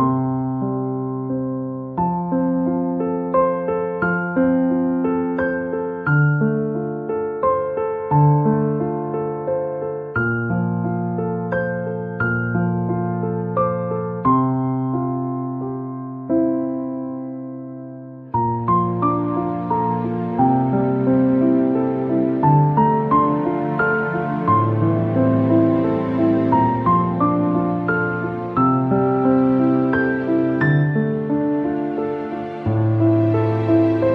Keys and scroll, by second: 1.9 a, 3.2 BackSpace, 11.5 a, 19.6 Return, 23.3 ctrl+a, 25.6 Down, 30.0 Up, 33.1 Down.